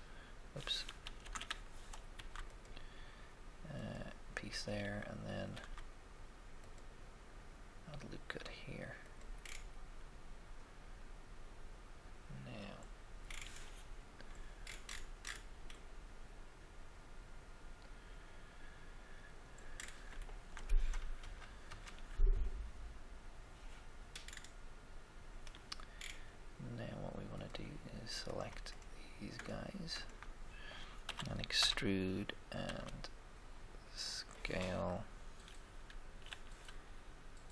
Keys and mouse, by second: 1.2 ctrl+z, 2.1 ctrl+r, 5.5 ctrl+r, 5.6 ctrl+r, 9.5-11.7 middle drag, 12.8-14.8 middle drag, 14.9 middle click, 15.4-17.7 middle drag, 19.9-21.1 shift+middle drag, 21.1 KP_1, 21.1 1, 21.6 middle click, 21.6 KP_3, 21.6 3, 24.3-26.3 middle drag, 27.5 click, 28.3 right click, 29.9-31.6 shift+right drag, 31.1 e, 31.6 Escape, 32.7 s, 35.8 g, 36.0 g.